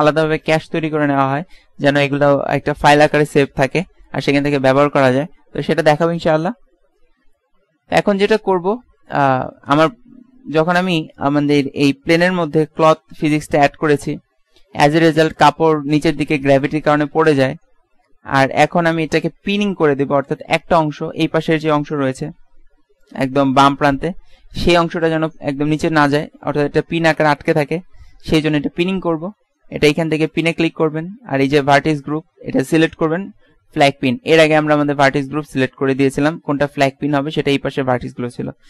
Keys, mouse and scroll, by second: 9.5-14.0 middle drag, 30.4-33.4 drag.